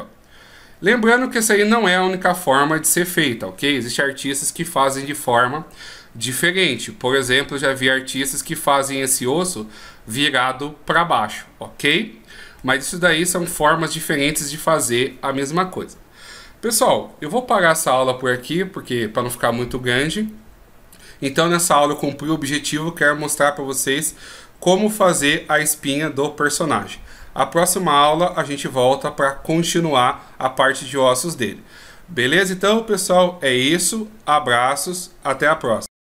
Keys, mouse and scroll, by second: 6.6 middle click, 8.3 right click, 12.1 middle click, 13.2 right click, 14.2 right click.